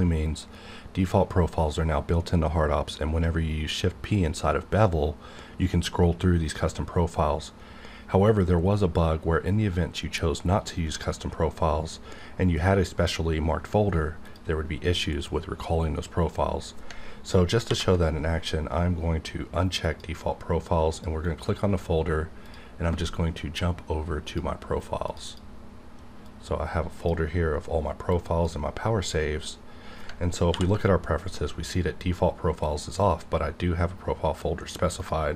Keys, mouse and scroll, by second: 14.3 click, 15.3-16.2 scroll up 1, 16.2-16.9 scroll down 1, 17.7 ctrl+k, 19.8 click, 25.2 click, 26.2 click, 26.2-28.1 drag, 30.5 ctrl+k, 35.0 click.